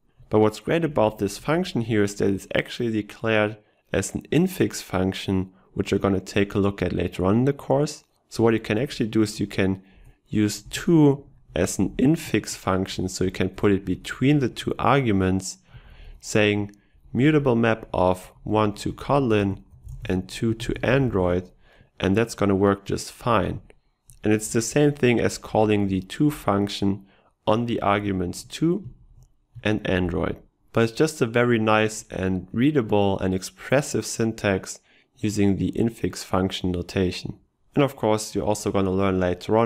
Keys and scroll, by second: 24.7 ctrl+shift+Left.